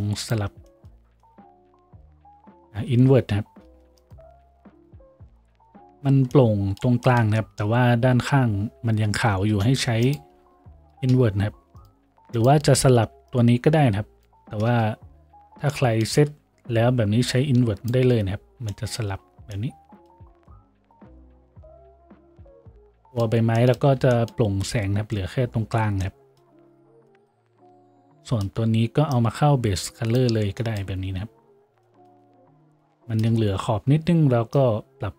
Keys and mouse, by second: 3.1-35.1 shift+drag, 3.8 shift+a, 9.8 shift+a, 15.0 ctrl+z, 19.2 a, 25.1 a.